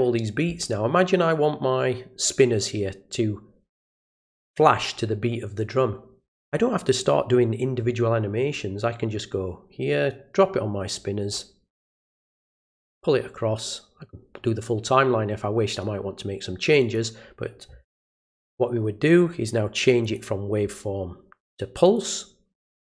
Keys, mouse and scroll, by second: 8.5-11.3 drag, 12.5-15.7 drag, 16.8 click, 20.0 click, 21.8 click.